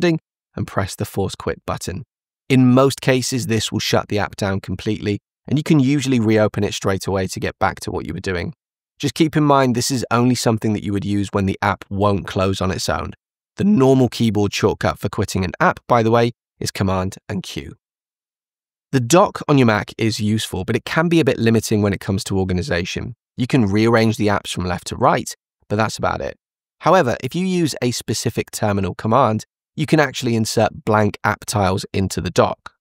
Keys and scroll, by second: 16.7 super+q.